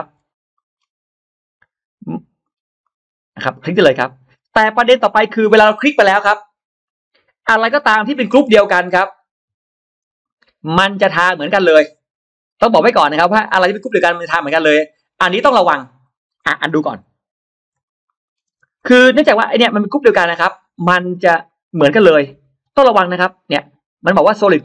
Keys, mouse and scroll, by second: 0.4 middle click, 0.6 scroll down 2, 1.4 click, 2.3-2.6 scroll down 2, 2.7-4.1 middle drag, 4.1 scroll down 1, 7.3-7.6 scroll up 1, 7.7-10.1 middle drag, 10.1-10.4 scroll down 2, 10.6-11.4 scroll down 2, 10.9-12.6 middle drag, 12.8-13.7 scroll up 4, 13.7 middle click, 14.1-14.8 scroll down 3, 14.8-15.2 scroll up 2, 15.9 scroll down 2, 16.2 middle click, 17.3 ctrl+z, 17.7-18.1 scroll down 2, 17.9-18.4 middle drag, 18.4 space, 18.6-18.9 scroll up 1, 19.2 click, 21.3 middle click.